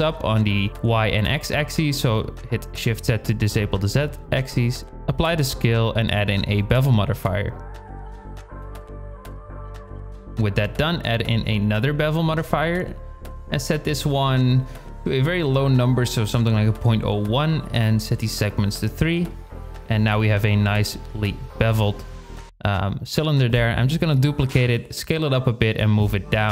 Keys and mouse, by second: 4.5 ctrl+a, 6.7 drag, 7.3 click, 11.1-12.4 drag, 14.1 z, 15.4-17.3 drag, 17.9-19.5 drag, 20.0 shift+d, 21.5 s, 24.4 g.